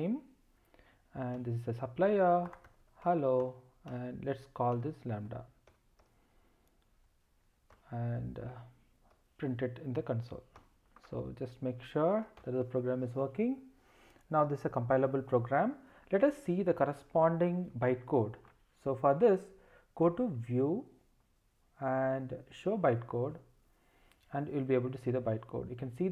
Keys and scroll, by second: 3.4 Return, 7.7 Return, 10.5 Return, 12.2 ctrl+alt+shift+r.